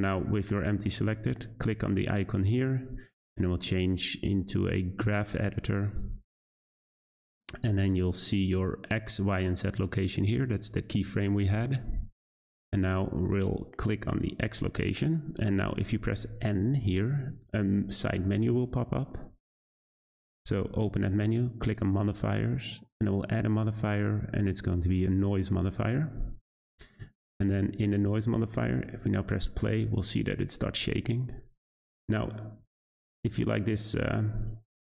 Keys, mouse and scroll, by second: 2.3-5.5 drag, 8.0 click, 14.1 click, 16.4-19.3 typing, 21.6 click, 23.3-29.5 drag, 29.5 space.